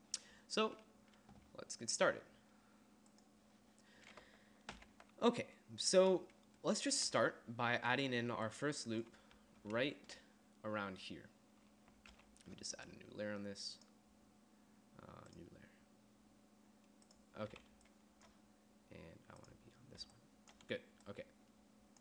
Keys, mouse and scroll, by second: 4.9 n, 8.4-9.6 d, 12.3 n, 17.9 d, 18.5 d, 20.2 d, 20.7 d, 20.9 d.